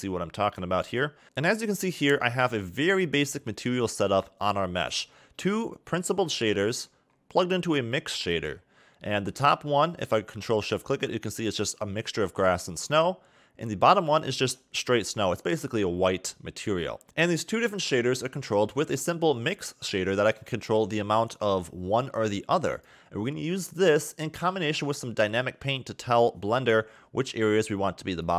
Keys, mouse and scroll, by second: 0.6 n, 4.7-5.0 scroll up 4, 6.3 middle click, 6.9-7.2 scroll up 4, 7.7 click, 8.5-8.8 scroll down 5, 9.9 ctrl+shift+click, 11.3-11.7 scroll up 2, 13.9 ctrl+shift+click, 16.1-16.5 scroll down 3, 17.0 middle click, 18.3 middle click, 18.9-19.5 scroll up 6, 20.2 click, 24.5-25.1 scroll down 5, 25.1 middle click, 26.7 scroll down 2, 28.0 click.